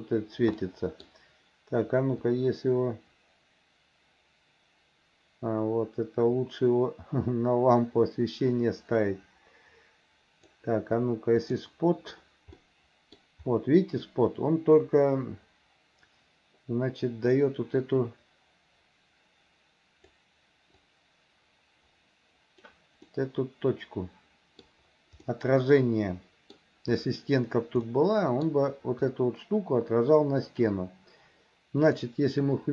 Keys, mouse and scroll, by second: 0.6 middle click, 2.3-10.5 drag, 11.5 click, 12.6 middle click, 17.4-20.2 drag, 20.8-22.7 drag, 23.1-24.7 middle drag, 25.3-26.6 middle drag, 27.9 middle click, 31.9 click.